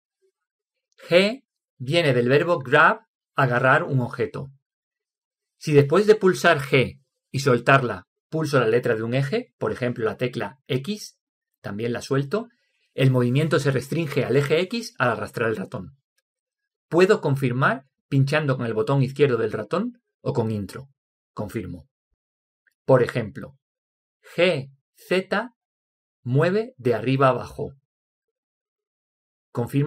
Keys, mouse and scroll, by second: 17.9 Return, 26.6 g.